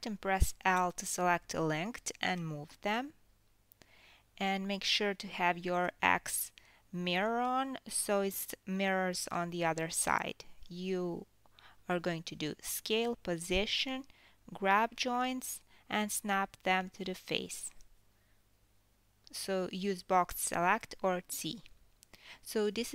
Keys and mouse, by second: 0.7 KP_1, 2.3 KP_3, 3.3 g, 4.7 s, 6.3 g, 7.6 click, 8.4 g, 9.7 click, 10.4 g, 10.9-12.4 ctrl+middle drag, 12.4-13.5 drag, 13.5-16.0 middle drag, 14.1 g, 16.0-18.3 drag, 17.1 g, 18.3-18.9 ctrl+middle drag, 18.9-21.7 drag, 19.9 g, 21.7-22.9 ctrl+middle drag.